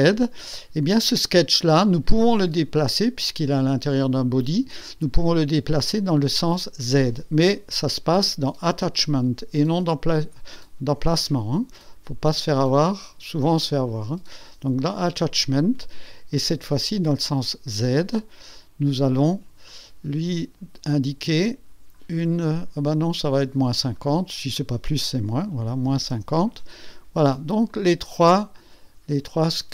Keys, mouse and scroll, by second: 5.9 click, 9.0 click, 10.1 click, 12.7-14.1 drag, 14.9 click, 17.4 click, 18.4-18.7 scroll up 1, 19.7 click, 20.5 scroll up 1, 21.1-21.9 scroll down 4, 22.6-23.5 scroll down 4, 24.3 scroll down 2, 25.5 KP_Subtract, 25.8 KP_5, 26.1 KP_0, 26.8 KP_0, 27.7 click, 28.3-29.7 drag.